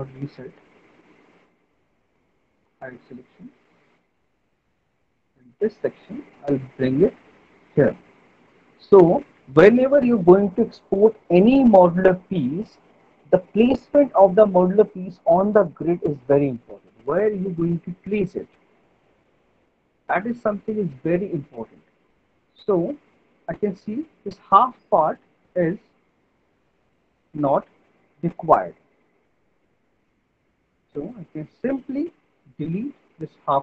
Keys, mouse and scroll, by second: 1.2 middle click, 1.4 right click, 3.1 right click, 3.7 alt+middle click, 4.5 right click, 5.5 alt+middle click, 7.9 click, 9.2 alt+middle click, 17.6 alt+middle click, 18.6 middle click, 19.1 middle click, 22.5 alt+middle click, 22.9 middle click, 23.9 alt+middle click, 25.1 middle click, 25.4 middle click, 27.0 click, 28.2 Delete, 30.5 middle click, 30.9 middle click, 31.3 alt+middle click, 32.1 middle click, 33.4 click.